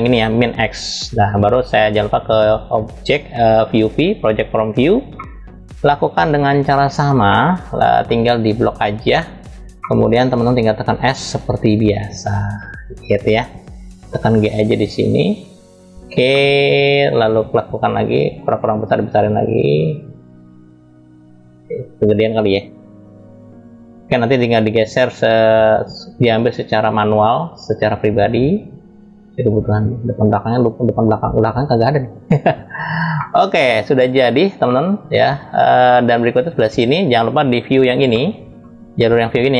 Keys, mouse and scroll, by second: 0.2 click, 1.8-4.9 drag, 4.9-6.5 middle drag, 7.0 middle click, 7.8 scroll up 1, 8.4-9.0 drag, 9.0 scroll down 1, 9.4 middle click, 10.5 s, 15.9 middle click, 16.4-16.7 scroll up 1, 17.8 s, 24.1-28.9 drag, 29.0-31.3 drag, 32.4 click, 32.9-33.9 middle drag, 34.4-35.5 middle drag, 36.2 click, 37.8 middle click.